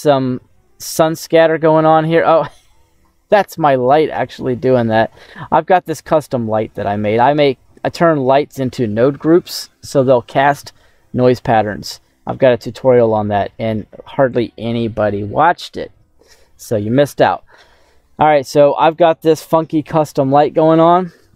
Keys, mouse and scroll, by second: 0.0 middle click, 0.4-2.1 drag, 2.2 scroll down 1, 3.1 scroll down 2, 5.4 middle click, 7.0 scroll up 2, 11.0 scroll down 2, 11.6 middle click, 17.5 scroll up 2, 17.8 middle click, 18.5 scroll up 1, 19.4 middle click, 20.5 scroll up 2.